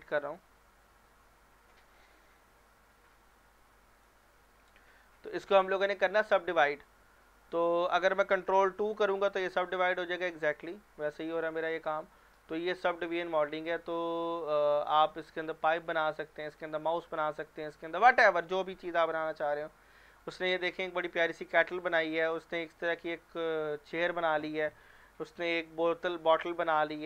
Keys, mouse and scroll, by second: 4.0 click, 4.4 middle click, 4.7 Tab, 5.6 click, 8.8 ctrl+2, 9.5-10.1 middle drag, 11.5 scroll up 1, 11.9-12.5 middle click, 13.1 scroll down 1, 15.4 middle click, 16.4 click, 18.4 scroll down 1, 20.1 click, 21.5 scroll down 1, 22.2 click, 24.6 scroll down 1, 25.2 click, 25.4 click.